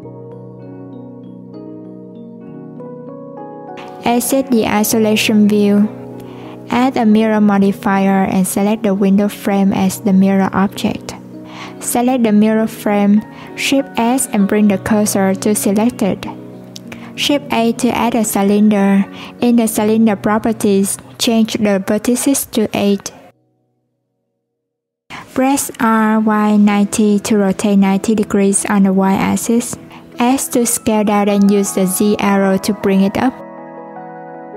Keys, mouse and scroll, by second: 1.8 right click, 2.1-2.6 scroll up 2, 2.6 right click, 3.8 click, 4.4-7.3 drag, 11.0 click, 13.2 click, 15.2 shift+s, 18.6 shift+a, 21.8-24.5 drag, 25.4 r, 29.4 s, 31.9 click, 34.0 click.